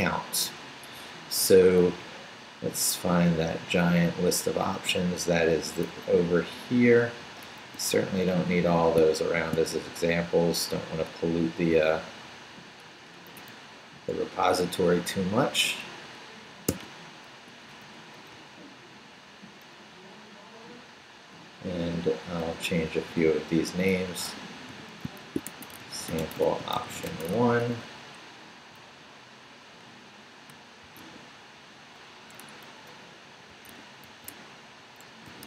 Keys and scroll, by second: 2.0 Down, 6.2 Down, 7.6 Up, 9.0 shift+Up, 9.3 shift+v, 9.7 shift+Up, 10.6 Up, 13.5 Down, 14.7 Down, 16.7 d, 17.5 Up, 18.3 Right, 22.5 Right, 23.8-27.8 typing, 28.8 Left, 30.6-31.5 typing, 32.3 Escape, 32.8 Left, 33.3-35.4 typing.